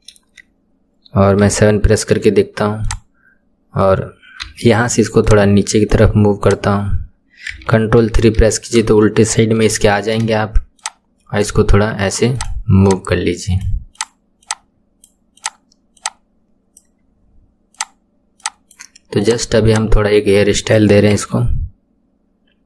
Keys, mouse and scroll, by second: 1.4 KP_7, 2.8 click, 4.4 KP_1, 5.2 drag, 6.4 click, 8.0 ctrl+KP_3, 9.7-10.7 shift+middle drag, 10.7 click, 12.3 click, 13.9 click, 15.4 click, 16.0 click, 17.7 click, 18.4 click, 19.2 click, 19.7 click, 21.1 KP_1.